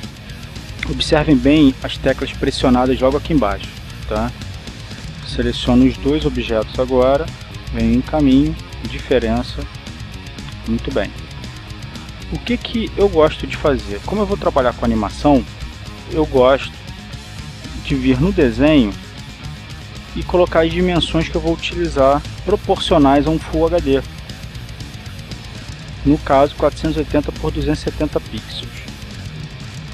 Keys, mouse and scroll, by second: 0.3 ctrl+shift+click, 7.3 shift+click, 8.9 click, 10.1 click, 12.8-13.9 drag, 15.1 click, 17.6 click, 18.5 click, 20.6 click, 21.3 click, 23.1 KP_4, 23.3 KP_8, 23.5 KP_0, 25.0 click, 26.7 KP_2, 27.0 KP_7, 27.2 KP_0, 28.3 click.